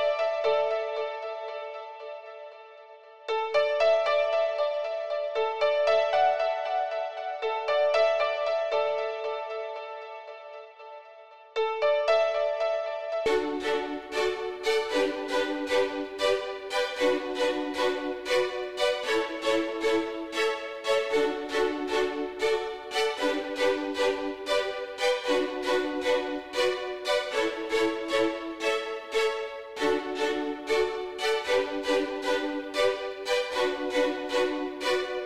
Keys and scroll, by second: 13.2 s.